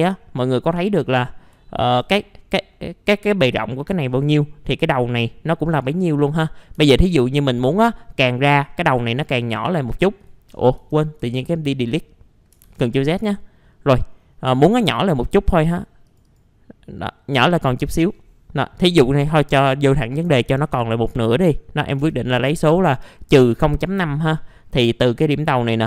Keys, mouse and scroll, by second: 0.4-0.8 scroll down 1, 1.6 alt+middle click, 2.1-2.9 scroll up 1, 4.1 scroll down 1, 4.4-5.5 middle drag, 5.7 scroll down 1, 6.4-7.5 middle drag, 6.7 Delete, 8.9-10.2 scroll up 1, 10.2 click, 10.8 ctrl+z, 11.2 ctrl+z, 12.6 ctrl+z, 15.0 click, 20.3 KP_0, 20.5 KP_Decimal, 20.7 KP_5, 23.8 middle click, 23.9 scroll down 1, 24.7-25.7 scroll up 1, 25.7 click.